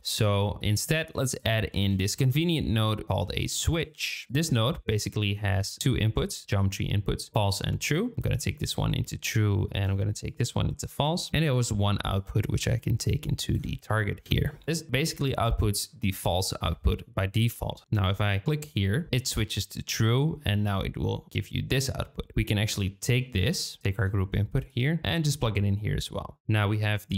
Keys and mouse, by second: 0.6 shift+click, 0.9 shift+a, 5.6 shift+middle click, 8.1-9.1 drag, 9.1 shift+middle click, 10.3-10.9 drag, 12.1-14.3 drag, 14.6 click, 18.8 click, 22.4 shift+click, 23.8 ctrl+click, 24.6-25.9 drag, 26.4 n.